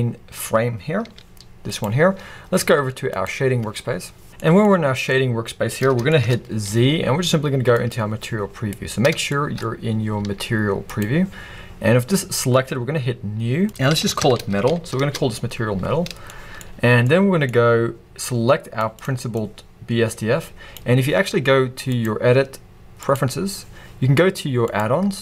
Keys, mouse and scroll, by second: 1.0 g, 1.9 right click, 4.3 click, 4.4-13.7 middle drag, 4.7-5.1 scroll up 2, 6.0 scroll up 2, 7.9 z, 11.0 z, 13.7-25.2 drag, 15.1 Return.